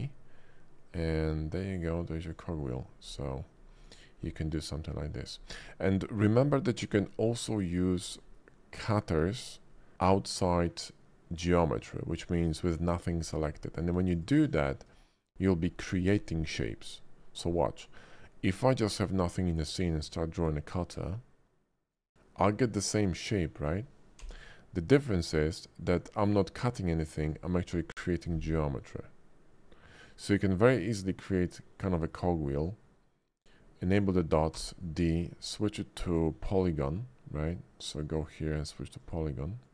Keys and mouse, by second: 2.3 click, 3.1 click, 4.5-5.3 drag, 4.7 middle click, 6.0 middle click, 8.0 shift+middle drag, 8.9-9.4 middle drag, 12.7 shift+middle drag, 13.3 middle click, 14.2 click, 14.3 x, 15.0 shift+middle click, 18.7 shift+middle drag, 20.0-21.9 drag, 24.2 b, 28.5-30.5 middle drag, 31.9 shift+middle click, 34.5 d.